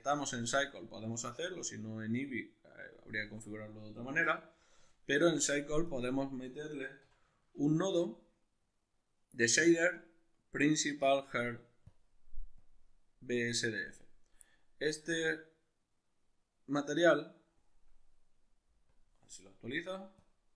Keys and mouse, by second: 4.1 n, 4.5-5.5 middle drag, 5.5 drag, 7.1 x, 7.5 shift+a, 11.9 click, 12.6 click, 18.4-18.9 drag, 20.2 click.